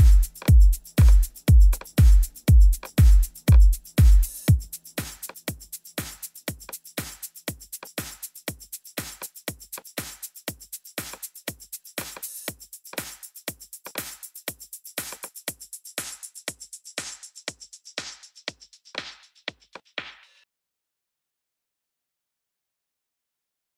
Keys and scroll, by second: 4.5 super+t.